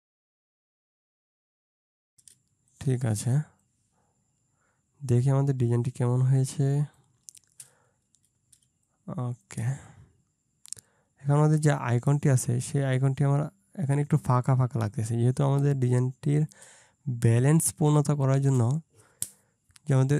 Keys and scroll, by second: 0.0 ctrl+space, 0.8 ctrl+space, 3.4 ctrl+space, 8.7 ctrl+space, 17.5 ctrl+space.